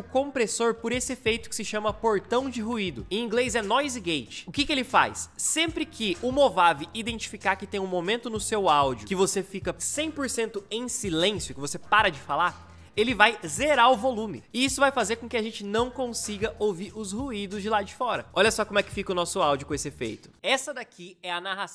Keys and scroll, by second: 20.2 space.